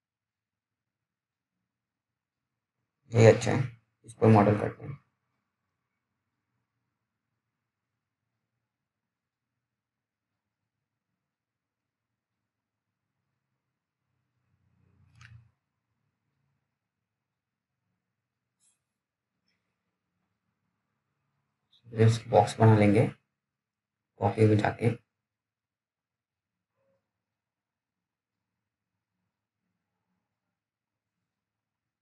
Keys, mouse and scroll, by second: 16.2 click, 23.4 scroll up 1, 23.6 scroll down 1, 23.8 middle click, 24.1-25.1 scroll up 1, 25.1 click, 30.5 click.